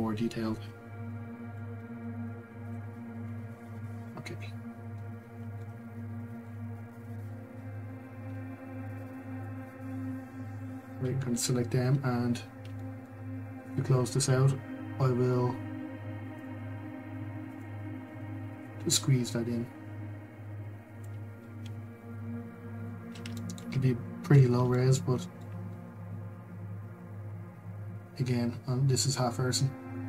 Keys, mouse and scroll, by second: 1.1 middle click, 1.7 u, 5.2 scroll, 5.6-6.6 middle drag, 6.6 scroll, 10.6 click, 16.4-18.8 drag, 23.3 shift+middle click, 23.7 scroll, 24.7-30.0 shift+middle drag.